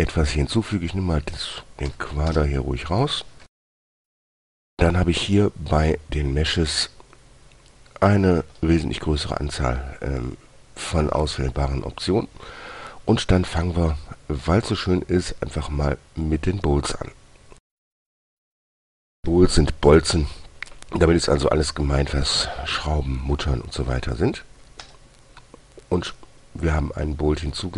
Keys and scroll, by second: 2.2 Delete, 2.6 Return, 4.0 shift+a.